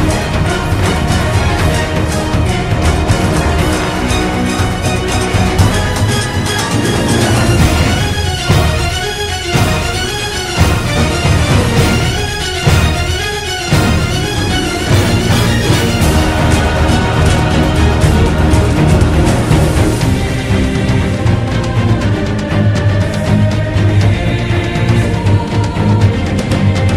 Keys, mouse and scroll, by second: 0.8 ctrl+-, 0.9 ctrl+=, 2.1 ctrl+z, 2.8 ctrl+-, 2.9 ctrl+=, 3.6 ctrl+z, 4.3 ctrl+z, 4.7 ctrl+z, 7.9 right click, 8.6 ctrl+=, 9.1 ctrl+z, 9.6 ctrl+z, 9.9 right click, 11.7 ctrl+=, 12.0 ctrl+-, 12.4 ctrl+z, 13.9 ctrl+z, 14.4 ctrl+-, 15.0 right click, 15.8 ctrl+z, 16.4 ctrl+z, 17.4 ctrl+=, 17.9 ctrl+z, 18.6 ctrl+z, 19.9 ctrl+z, 20.3 ctrl+z, 23.9 ctrl+z, 25.9 ctrl+z, 26.5 ctrl+=.